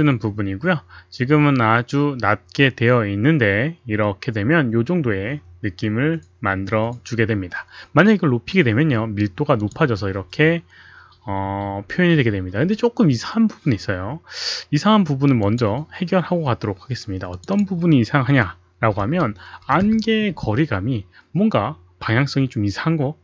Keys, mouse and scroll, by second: 9.6 click, 15.4 click, 17.3 click, 19.0-21.0 typing, 19.7 click, 19.8 Return.